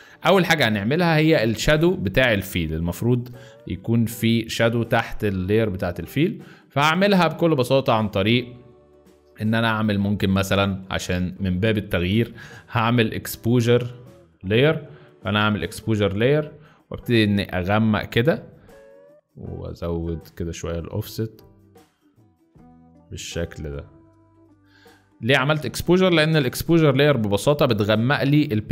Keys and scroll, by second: 0.3 z, 26.4 ctrl+i, 27.5 z.